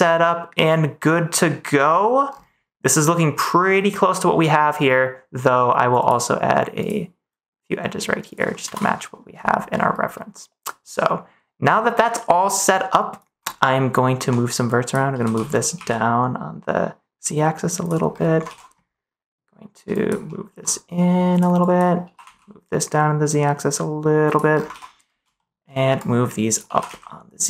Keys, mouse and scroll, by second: 5.9-8.6 drag, 14.1 w, 14.6 click, 15.1 g, 15.3 x, 15.7 z, 18.4 ctrl+s, 19.9 click, 20.4 g, 21.3 click, 21.7 click, 22.0 g, 22.2 z, 24.2 click, 24.7 ctrl+s, 25.3 middle click, 26.0 click, 26.6 g, 26.8 z.